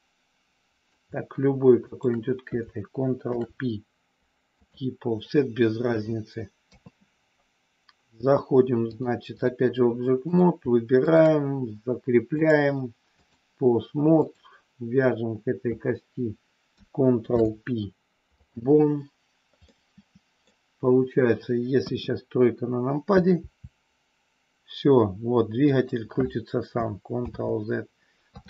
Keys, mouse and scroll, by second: 1.9 shift+click, 3.3 ctrl+p, 5.3 middle click, 6.6 KP_3, 8.9 click, 12.4-13.4 drag, 14.2 click, 17.2 ctrl+p, 19.6 middle click, 21.8 KP_1, 23.3 r, 25.7 click, 27.2 ctrl+z, 28.2 KP_3.